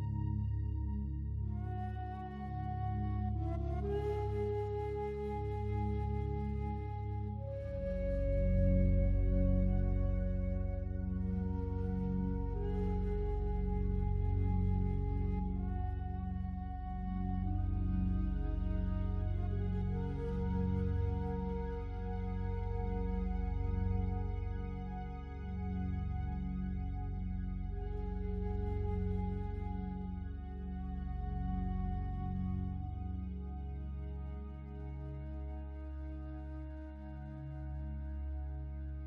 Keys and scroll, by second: 20.3 ctrl+t, 33.0 ctrl+l.